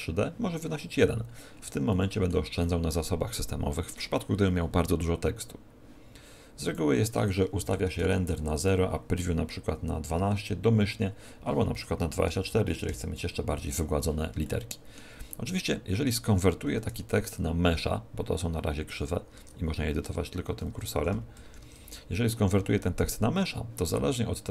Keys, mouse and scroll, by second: 1.2-1.8 scroll down 5, 1.8 shift+middle click, 2.6 middle click, 6.6 click, 8.6 click, 14.4 shift+middle click, 15.2 middle click, 16.7 KP_1, 19.3 Tab, 20.4 Left, 20.6 Left, 20.9 Right, 21.3 Right, 21.6 Tab.